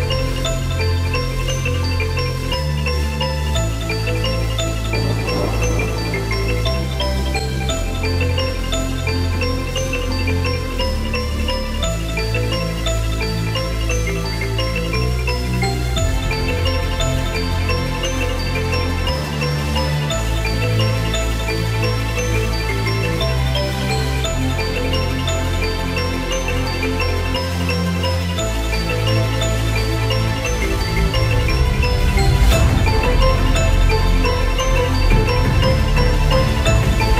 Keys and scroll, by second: 2.9 alt+Delete, 6.1 ctrl+d, 8.6 Left, 10.1 Up, 13.6 Left, 33.1 Left, 36.3 Right.